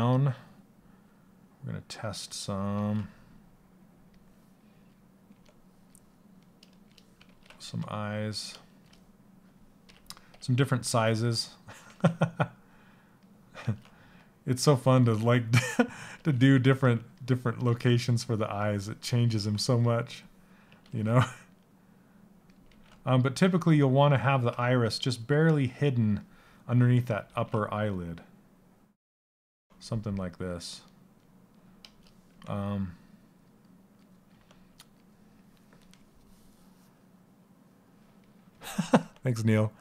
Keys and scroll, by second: 11.5 ctrl+z, 15.8 ctrl+z, 17.3 ctrl+z, 18.9 ctrl+z, 22.2 ctrl+z.